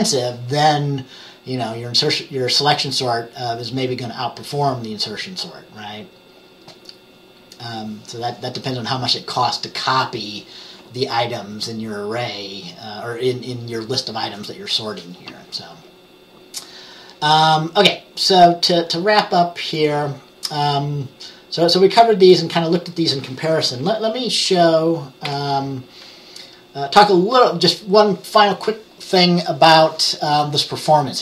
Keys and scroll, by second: 25.4 Page_Down.